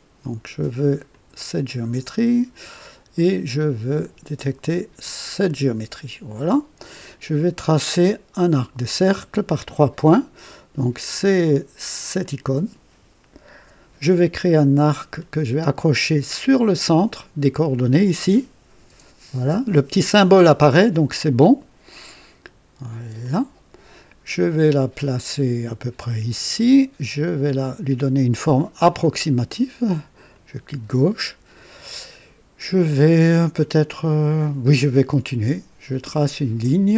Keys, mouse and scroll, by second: 1.0 click, 5.2 click, 11.1 click, 12.2 click, 15.0 scroll up 2, 23.2 click, 26.2 click, 30.3 click, 31.6 right click.